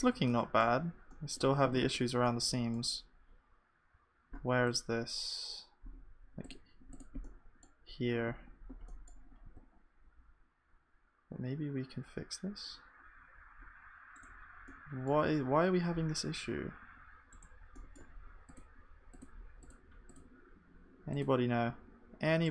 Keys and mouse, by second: 1.9 Tab, 5.8-22.5 drag, 5.8-22.5 right drag.